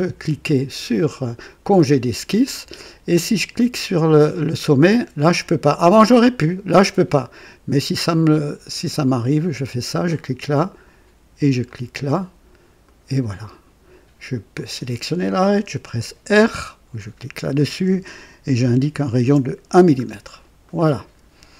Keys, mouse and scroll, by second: 1.5 click, 9.1 click, 11.6 click, 12.8 right click, 14.5 click, 16.2 r, 16.4 r, 18.5 KP_1, 19.2 KP_Enter, 19.9 scroll down 2, 20.6-21.4 right drag, 20.6 click.